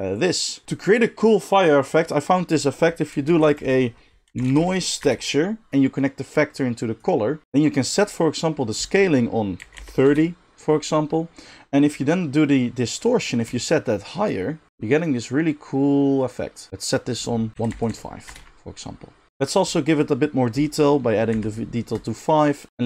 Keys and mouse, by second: 3.2 shift+a, 5.0 right click, 5.7-6.2 middle drag, 6.2-22.0 drag, 22.0-22.8 middle drag.